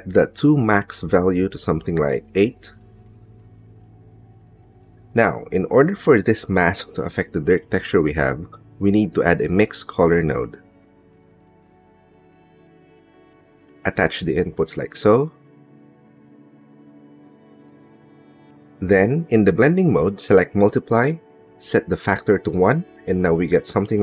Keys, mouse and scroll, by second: 0.5 middle click, 1.7-3.3 drag, 4.7 middle click, 5.2 click, 6.1 click, 6.9 click, 7.5 middle click, 9.4 middle click, 10.4 shift+a, 13.8 click, 15.5 click, 16.7 click, 18.5 middle click, 19.7 middle click, 21.2-23.2 drag, 23.8-24.0 scroll up 1.